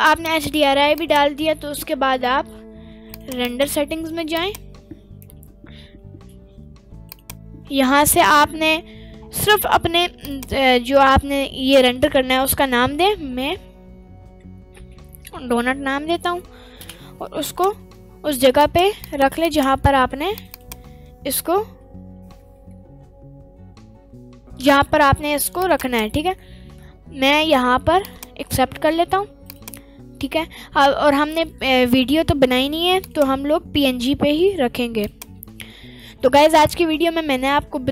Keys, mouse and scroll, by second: 3.1 click, 4.3 click, 7.1 click, 10.2-16.8 drag, 17.4 click, 29.4 click, 33.0-35.1 drag.